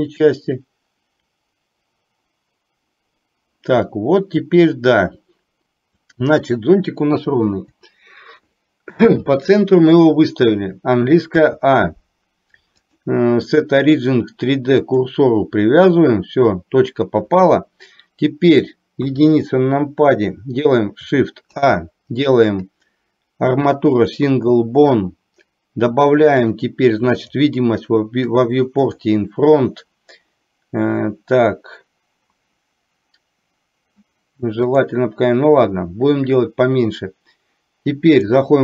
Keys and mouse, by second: 6.1 click, 7.5 Delete, 12.9-15.1 drag, 19.1 KP_1, 21.5 shift+a, 26.5 click, 27.2 click, 28.4 click, 29.0 click, 34.9-38.4 drag.